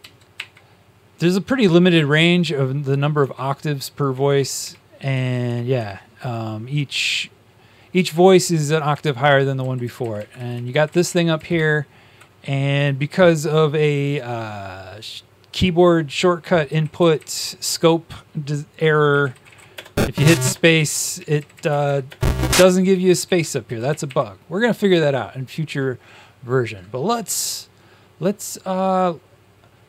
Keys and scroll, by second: 0.3 Up, 1.6 Down, 3.1 Tab, 4.2 shift+Tab, 4.6 shift+Tab, 9.5 Left, 9.8 Left, 10.1 Left, 10.2 Left, 10.4 Left, 10.7 Left, 10.9 Left, 11.3 Left, 12.1 Left, 16.6 Right, 16.9 Left, 17.1 Left, 17.7 Left, 18.8-21.1 typing, 21.3 Left, 21.6 Left, 21.7 Left, 21.8 Left, 22.5 space, 23.0 Right, 23.0 Down, 23.0 Left, 23.2 Right, 23.3 Down, 23.4 Left, 23.7-24.5 typing.